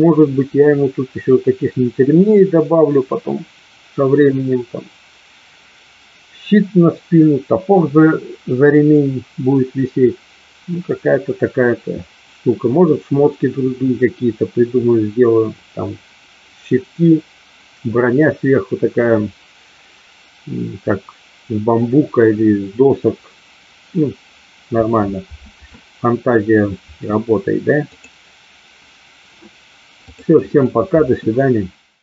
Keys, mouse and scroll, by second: 27.8 click.